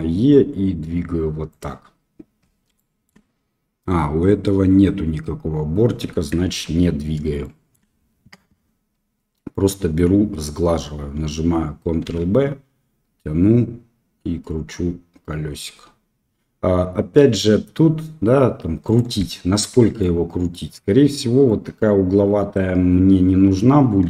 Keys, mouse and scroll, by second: 2.8 shift+click, 6.3 ctrl+z, 7.4 shift+click, 12.0 ctrl+b, 19.1 middle click, 19.7 Tab, 20.0-20.5 middle drag, 21.4-22.5 middle drag, 22.9 Tab, 24.0 3.